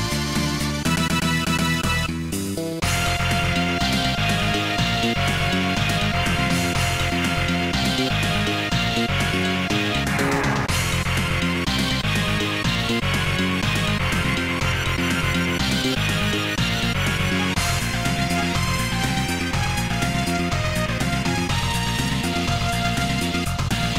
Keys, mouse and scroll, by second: 8.1 Tab, 8.6 click, 17.2 scroll up 1, 18.1 ctrl+s, 19.5 right click, 23.7 click.